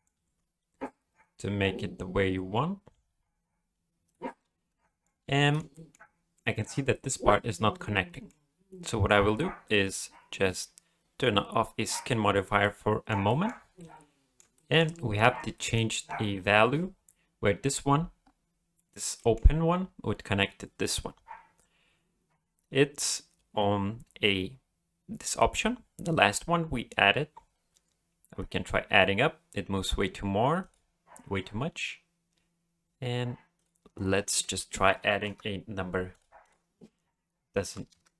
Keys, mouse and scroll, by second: 0.1 s, 4.3 middle click, 5.2 alt+a, 5.4 middle click, 5.7 shift+middle click, 6.0-6.3 scroll up 1, 6.3 middle click, 6.9 middle click, 7.9 middle click, 9.4-9.7 scroll down 2, 9.7-10.4 scroll up 4, 11.9 click, 12.6 middle click, 13.3 shift+middle click, 13.8 middle click, 14.5 shift+middle click, 14.9-15.4 scroll up 1, 15.5 shift+middle click, 18.2-18.5 scroll up 3, 19.2 shift+middle click, 21.8-22.3 scroll down 2, 24.3-25.8 scroll down 2, 25.8 scroll down 2, 28.4 click, 30.6 click, 33.5 click, 36.1 click.